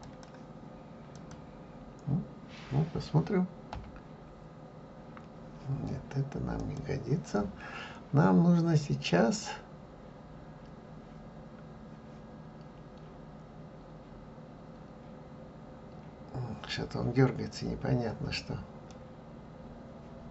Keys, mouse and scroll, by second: 0.3 click, 1.4 click, 4.6 F12, 19.2-20.3 middle drag.